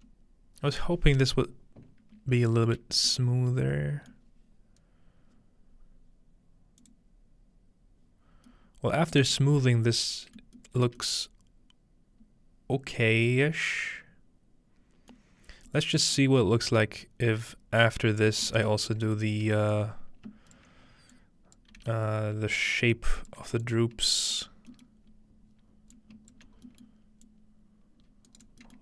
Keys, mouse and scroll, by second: 0.1-1.7 scroll up 2, 0.1-1.7 middle drag, 2.5-5.9 shift+middle drag, 6.8 click, 8.3-9.5 scroll down 2, 8.5-9.2 middle drag, 9.5 middle click, 9.5 scroll up 2, 10.6 shift+middle click, 15.4 middle click, 15.5 scroll down 2, 16.2 middle click, 16.5 scroll up 2, 17.2 scroll down 2, 18.0 scroll down 2, 18.9 scroll down 2, 19.7-20.6 scroll down 1, 19.7-23.0 drag, 20.8-22.0 scroll up 1, 21.7 g, 23.2-25.1 drag, 24.5-25.1 scroll down 1, 26.2 ctrl+click, 27.3-28.8 drag, 27.7-28.3 scroll down 1, 28.3-28.8 right drag.